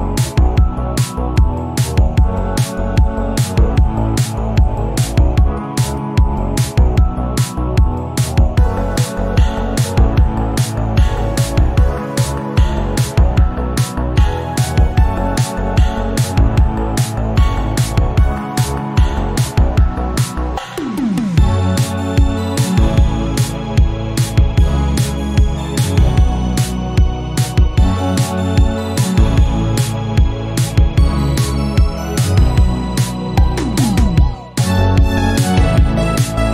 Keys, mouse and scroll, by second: 1.8 KP_1, 2.2 scroll up 1, 3.5-3.9 scroll down 4, 3.9-5.1 drag, 5.7-6.7 drag, 6.7-7.9 shift+middle drag, 7.9-8.9 drag, 8.9-9.7 scroll up 2, 9.7 scroll down 3, 10.3 shift+middle click, 11.1 scroll up 2, 12.8 shift+a, 15.6-17.5 drag, 17.8 scroll up 4, 18.4 scroll down 1, 18.7 shift+middle click, 19.3 click, 21.5 scroll up 1, 21.9 shift+middle click, 22.8-23.3 scroll up 1, 23.6 g, 26.2-26.8 scroll down 14, 26.8-27.1 scroll up 10, 27.1 shift+middle click, 27.5 scroll down 1, 27.8 shift+middle click, 28.5 click, 28.9 click, 29.7 shift+a, 32.8 scroll down 3, 33.3-34.7 middle drag, 35.4-36.5 drag.